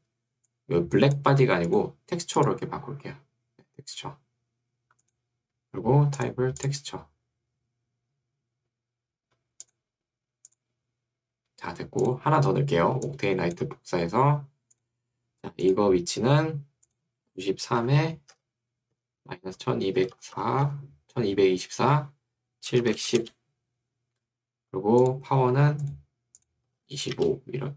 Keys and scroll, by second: 1.5 Escape, 17.9 9, 18.3 3, 18.9 Tab, 19.5 1, 20.1 2, 20.5 4, 20.7 Tab, 22.8 7, 23.2 0, 24.7 Return, 26.9 5, 27.1 Return.